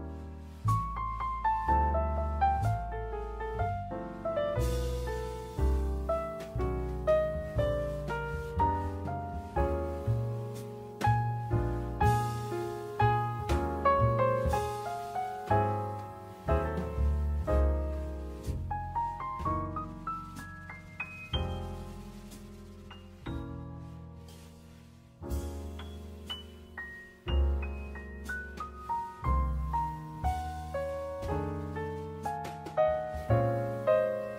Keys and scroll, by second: 11.9 Escape, 23.2 6, 23.4 Return, 26.2 Escape.